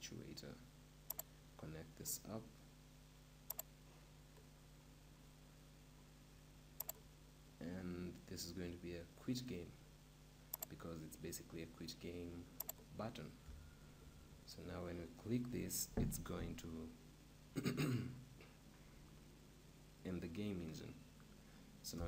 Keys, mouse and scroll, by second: 13.0-14.5 drag, 22.0 p.